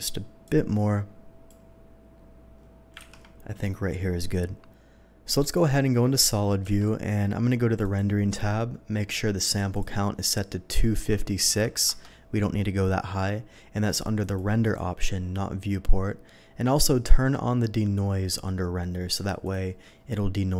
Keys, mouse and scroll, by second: 0.4-1.5 drag, 3.0 ctrl+z, 4.7 ctrl+s, 5.3 click, 6.7 z, 7.8 click, 9.7 click, 11.0 KP_2, 11.4 KP_5, 11.6 KP_6, 11.9 Return, 14.2 click, 14.6 click, 19.1 click, 19.4 click.